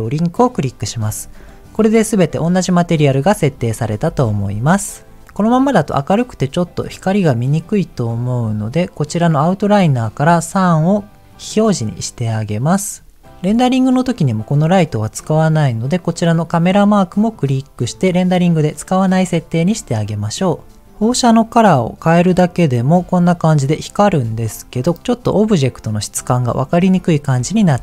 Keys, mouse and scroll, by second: 1.5 click, 4.0 ctrl+z, 8.0-8.8 scroll down 4, 9.6 click, 11.4 click, 17.3 click, 21.2 click, 24.9-26.3 middle drag, 26.5 shift+middle click, 27.1 scroll down 1, 27.4 shift+middle click.